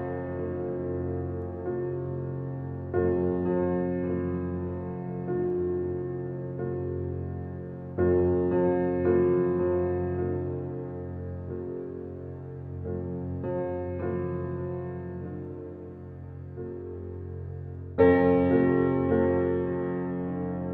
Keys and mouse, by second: 0.0 click, 0.5-1.6 drag, 2.0 click, 2.9 click, 3.5 click, 3.9 click, 4.3 click, 5.2 click, 5.7 click, 6.2 click, 7.4 drag, 8.3-10.2 drag, 10.4-13.6 drag, 13.7-16.3 drag, 16.6 click.